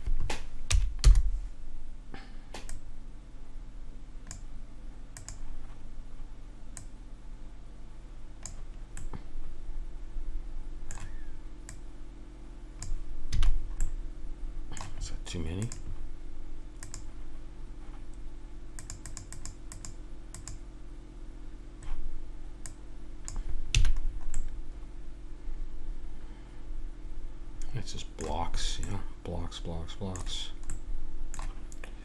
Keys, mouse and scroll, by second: 2.7-4.5 drag, 5.2-8.6 drag, 9.0-10.8 middle drag, 11.7-13.4 drag, 13.4 a, 13.5 middle click, 13.9-15.6 middle drag, 15.6 click, 17.0-18.6 drag, 18.8-22.0 drag, 22.6-24.0 drag, 23.7 a, 24.0-26.3 middle drag, 28.5 middle click.